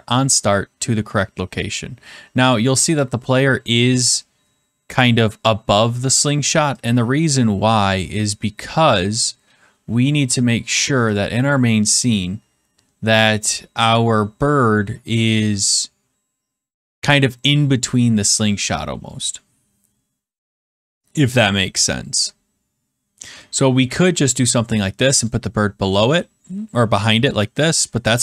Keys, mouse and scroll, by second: 7.6 click, 11.1 click, 24.0 click, 25.2 click.